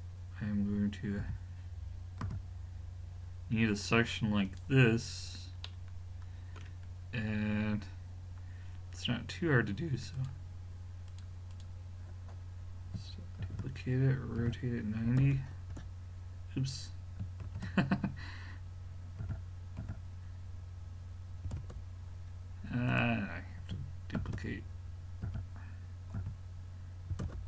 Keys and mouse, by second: 1.2 g, 5.0-5.7 middle drag, 7.8-10.2 middle drag, 10.2-13.4 drag, 13.5 shift+d, 17.5 ctrl+z, 19.2 r, 24.2 shift+d.